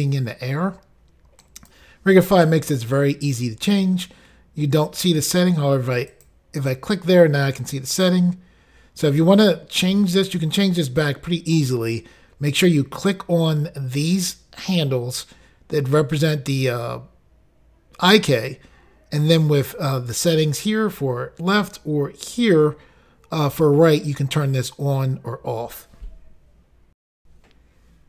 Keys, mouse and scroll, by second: 1.5 right click, 6.2 click, 6.3 click, 22.4 click, 22.5 click, 27.1 Insert.